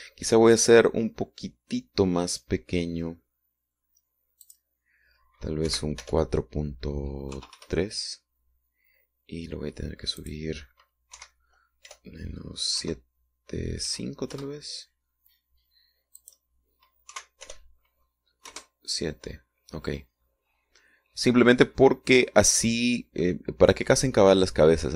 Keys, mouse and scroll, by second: 5.5 click, 6.7 Right, 7.1 BackSpace, 8.4 KP_3, 8.6 KP_Enter, 11.3 click, 12.2 Right, 12.9 BackSpace, 13.9 KP_7, 14.9 KP_5, 15.4 KP_Enter, 17.3 click, 18.2 Right, 18.5 BackSpace, 19.5 KP_Enter.